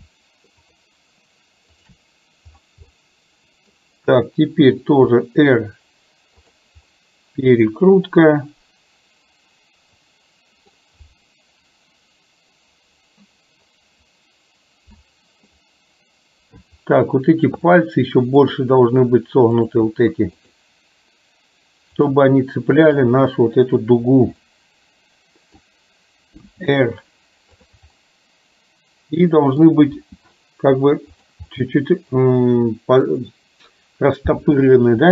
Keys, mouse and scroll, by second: 0.6-1.1 shift+drag, 1.7 shift+click, 3.0-3.8 middle drag, 4.8 r, 7.0-10.7 middle drag, 15.6-16.7 middle drag, 17.7-18.6 middle drag, 19.7 click, 20.3 shift+click, 22.1 shift+click, 22.8 shift+click, 24.6-25.7 middle drag, 26.5 r, 28.0-30.1 middle drag, 30.1 r, 31.6-33.0 middle drag.